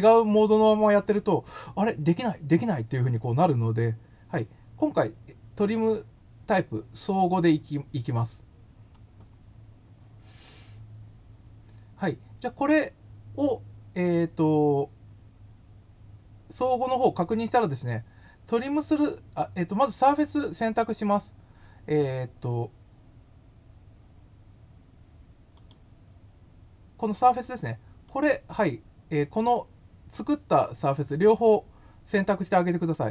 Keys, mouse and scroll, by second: 25.5 click, 28.0 click, 30.1 click, 32.9 click.